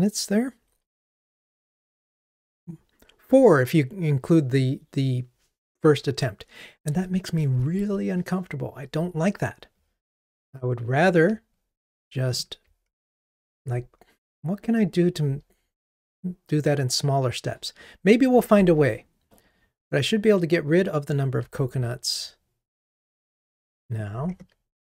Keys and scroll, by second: 24.4 super+BackSpace.